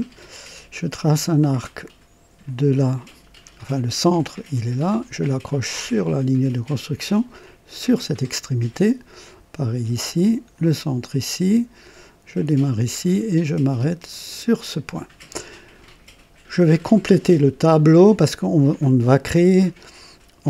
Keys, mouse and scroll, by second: 0.1 click, 2.4 click, 5.4 click, 7.6 click, 10.5 click, 12.3 click, 14.2 click, 15.4 right click, 16.7 scroll down 2.